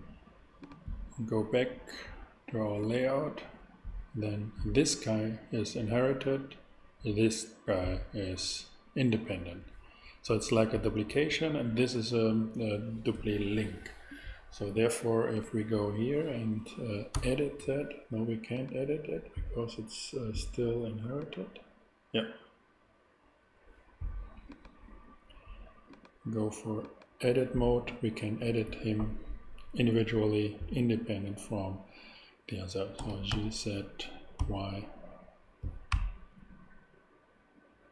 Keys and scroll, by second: 17.1 e, 33.0 g, 33.3 z, 34.4 y.